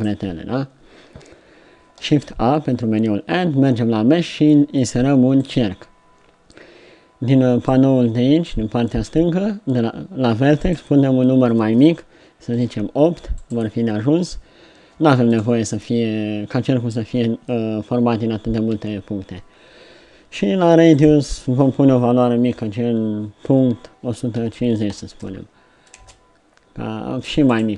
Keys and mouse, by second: 2.1 shift+a, 7.6-10.0 middle drag, 20.9-24.0 drag, 27.4-27.7 drag.